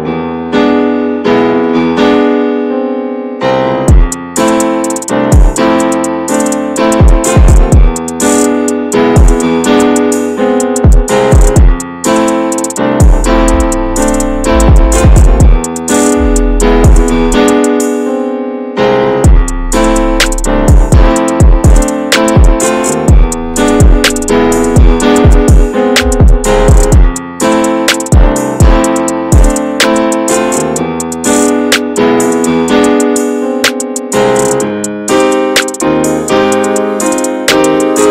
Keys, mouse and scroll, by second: 0.1-0.5 middle drag, 0.5-2.6 drag, 2.6 scroll up 2, 2.8 shift+middle click, 3.1 middle click, 3.5 g, 4.9 middle click, 5.1 click, 5.5 shift+middle click, 5.7 scroll up 1, 5.8 click, 6.6 shift+middle click, 7.2-10.4 drag, 10.4 middle click, 10.7 f, 12.7-14.3 shift+middle drag, 14.3 click, 15.0 scroll down 2, 15.1 middle click, 16.0 scroll down 3, 16.1-19.0 shift+middle drag, 19.0-20.2 drag, 20.2 scroll down 1, 20.3-22.7 middle drag, 22.7 scroll up 5, 23.0-23.5 scroll down 9, 23.5 middle click, 24.1 scroll up 1, 24.3-27.2 drag, 27.2 scroll down 3, 27.5-30.6 middle drag, 30.6-33.7 drag, 33.7 scroll down 2, 33.8 middle click, 34.8-35.2 scroll up 1, 35.2-36.8 drag, 36.8 scroll down 3, 37.0 middle click, 37.2 scroll up 1, 37.4-38.1 scroll down 7.